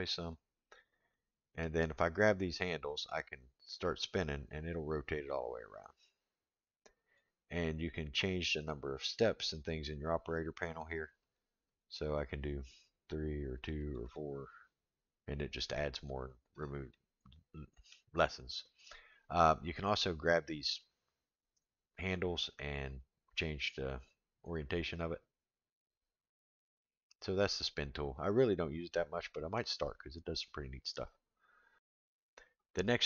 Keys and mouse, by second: 1.1 middle click, 2.7-7.2 drag, 11.7 click, 12.2 click, 13.5 click, 13.8 click, 14.0 click, 16.9-17.9 middle drag, 20.9-27.2 drag, 28.9 middle click.